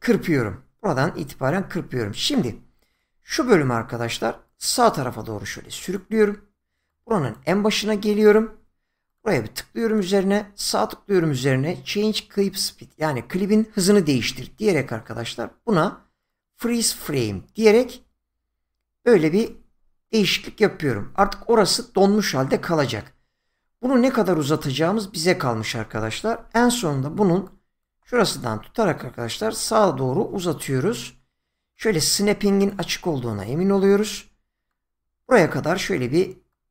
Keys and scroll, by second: 26.4 shift+,.